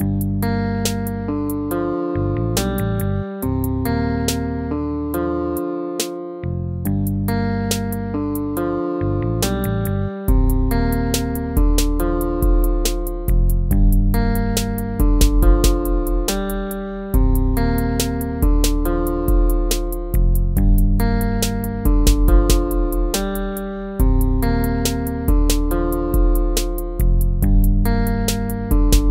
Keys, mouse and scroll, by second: 6.5 ctrl+-, 24.3 ctrl+-, 25.5 ctrl+-, 26.9 ctrl+-.